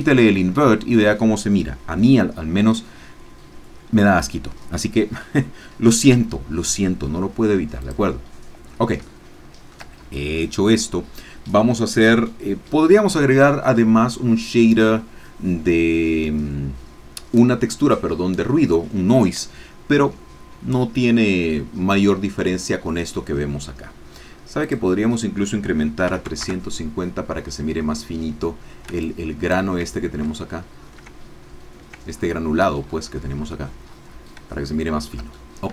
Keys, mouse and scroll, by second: 7.8 click, 9.1-10.2 shift+drag, 24.6 click, 26.0 KP_3, 26.1 KP_5, 26.3 KP_0, 26.4 KP_Enter, 29.0 ctrl+click, 30.3 ctrl+middle click, 32.1-33.3 ctrl+scroll down 2, 33.3-34.0 scroll down 1, 34.0-34.3 scroll down 1, 34.5 shift+middle click, 35.3 shift+middle click.